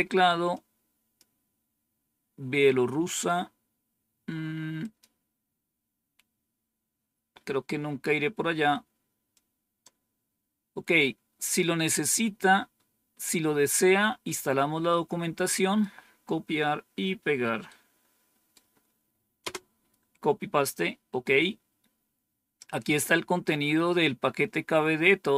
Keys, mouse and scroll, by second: 0.4 click, 4.7 click, 6.2-6.9 scroll down 2, 9.2-11.5 drag, 14.8 right click, 17.6 right click, 19.3 Return, 21.4-22.8 scroll down 3, 23.0-25.3 scroll down 4.